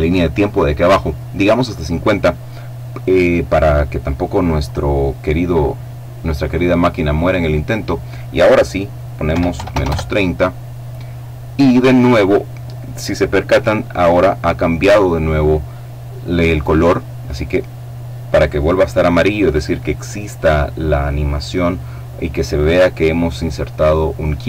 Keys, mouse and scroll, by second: 4.3 click, 8.9 KP_Subtract, 9.1 KP_3, 9.3 KP_0, 9.4 KP_Enter.